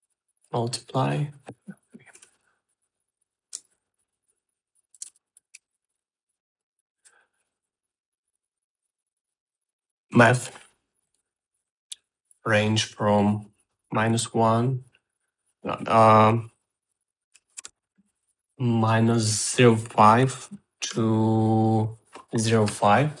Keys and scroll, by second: 2.9 Delete, 4.2-7.2 typing, 10.6-11.5 typing, 14.4-15.3 typing, 18.1 BackSpace, 18.3 0, 18.7 5, 20.7-22.1 typing.